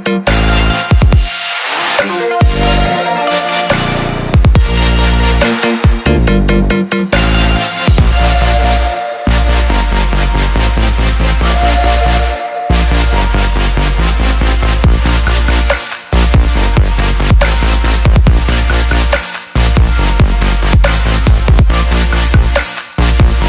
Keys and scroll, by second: 9.7-10.6 typing.